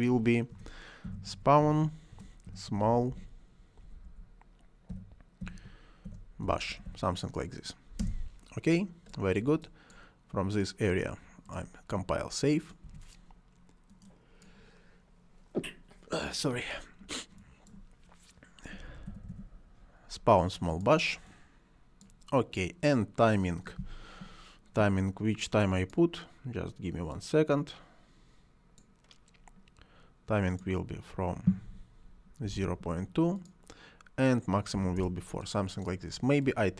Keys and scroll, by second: 0.4-3.7 typing, 4.8-7.3 typing, 7.9 Return, 12.8 Delete, 18.7-19.7 typing, 32.1-32.9 typing, 34.6 4, 34.9 Return.